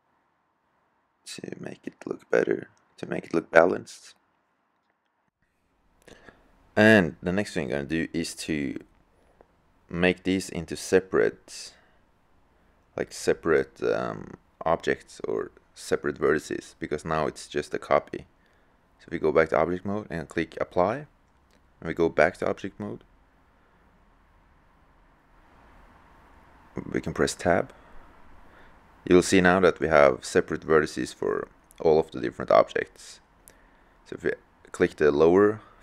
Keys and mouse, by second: 6.3-6.6 drag, 9.8 click, 13.3-14.9 drag, 20.6-22.8 drag, 27.6 Tab, 32.4-33.6 drag, 33.6 middle click, 34.3 click, 34.3 middle click, 34.9 click.